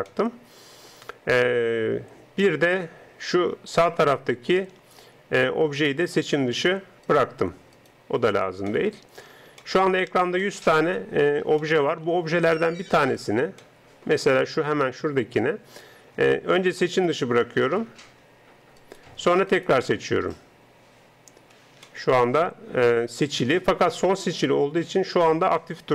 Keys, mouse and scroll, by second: 0.1 middle click, 0.7-1.9 middle drag, 2.7-7.1 middle drag, 7.1 right click, 8.9-10.6 middle drag, 9.1 right click, 12.2 middle click, 16.9 right click, 22.1 middle click, 22.9 middle click.